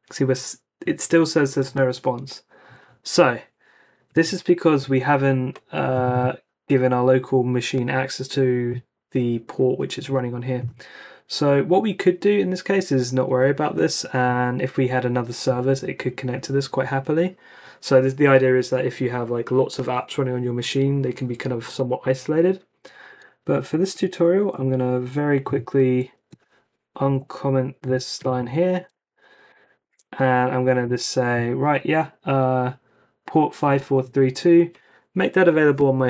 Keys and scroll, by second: 24.3 ctrl+c, 27.1 alt+Left, 27.8 x, 28.3 Down, 28.7 x, 29.5 ↺, 29.8 super+s, 30.8 ⟲.